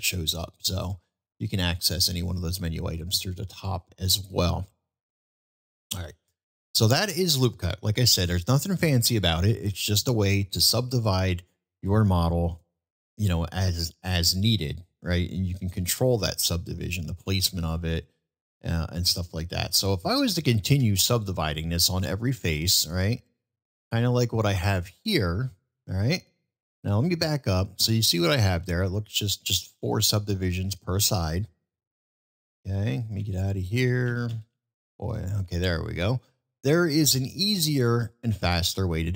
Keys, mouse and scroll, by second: 4.2-4.5 middle drag, 5.9 click, 7.4-7.9 middle drag, 9.6-10.0 middle drag, 11.4-11.7 middle drag, 13.6-14.1 middle drag, 15.2-15.6 middle drag, 16.3 middle drag, 17.4 middle click, 18.5-19.6 middle drag, 20.7 ctrl+r, 23.4-26.6 middle drag, 27.5-29.5 middle drag, 29.8-30.2 middle drag, 30.4-31.0 middle drag, 31.6-34.1 ctrl+z, 36.4-36.8 middle drag, 37.7 middle click.